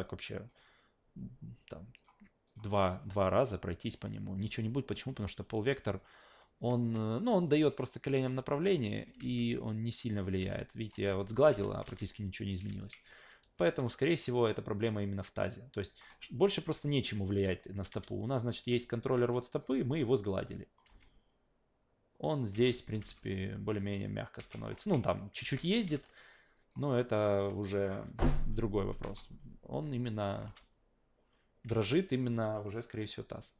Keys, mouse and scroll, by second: 1.9 click, 2.5 click, 4.4 f, 6.3 click, 6.8-7.2 alt+right drag, 7.5 alt+middle click, 8.9 click, 9.2 alt+v, 10.4 alt+v, 10.7 click, 10.9 alt+v, 11.5 alt+v, 11.7 click, 11.9 alt+v, 12.7 alt+v, 13.4 q, 15.1 click, 16.0 alt+middle click, 17.4 click, 17.9 q, 18.4 click, 18.6 w, 19.3 click, 19.7 ctrl+z, 20.6 click, 22.5 alt+v, 22.9 click, 23.0 alt+v, 24.4 alt+v, 24.6 click, 24.8 alt+v, 25.4 alt+v, 25.5 alt+click, 25.8 f, 26.2 alt+right click, 26.5 alt+right drag, 26.9 alt+middle click, 27.2-27.7 alt+drag, 27.9 scroll down 1, 29.1 alt+middle click, 30.3 click, 30.4 alt+v, 31.7 alt+v.